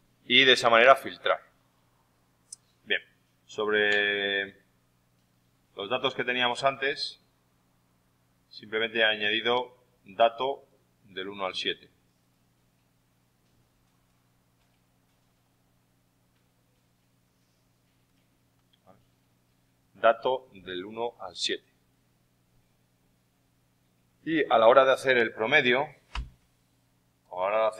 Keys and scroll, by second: 26.1 super+=.